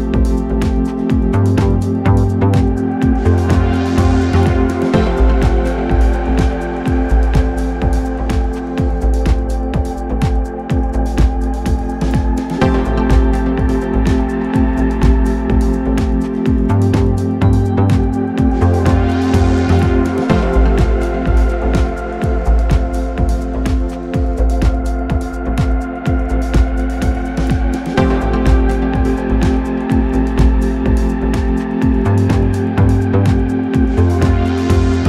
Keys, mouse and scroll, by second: 25.7-26.6 scroll down 3, 27.9-31.0 scroll down 6, 31.0-32.0 scroll down 1, 32.0-35.0 scroll down 1.